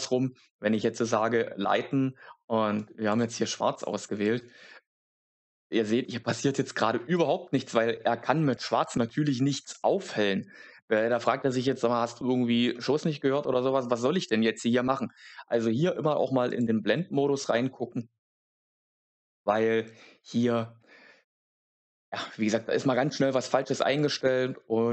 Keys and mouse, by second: 2.7 click, 4.2 click, 16.5-23.2 drag.